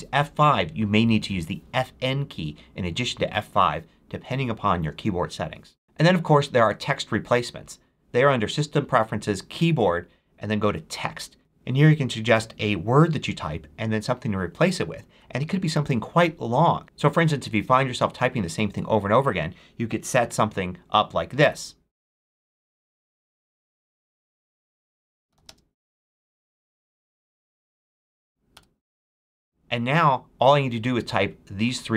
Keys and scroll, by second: 22.2-23.4 typing, 24.0 Tab, 24.6-27.3 typing, 28.4 Return.